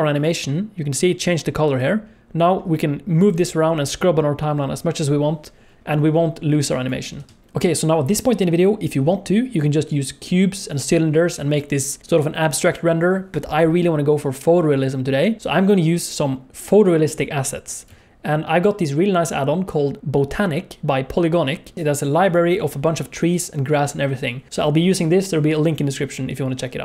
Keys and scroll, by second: 7.1 space, 17.8 n.